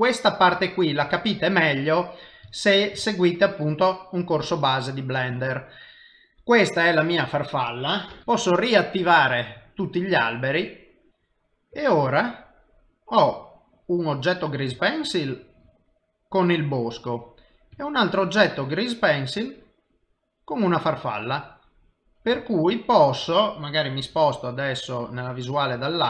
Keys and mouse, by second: 0.6 shift+middle click, 2.6 ctrl+middle click, 3.0 shift+middle click, 3.5 middle click, 7.1 click, 7.2 click, 8.2 BackSpace, 8.2 l, 8.9 l, 9.4 click, 11.1 shift+middle click, 12.0 middle click, 16.1 middle click, 18.2 shift+middle click, 18.9 shift+middle click, 21.6 ctrl+middle click, 22.8 shift+middle click, 24.4 KP_7.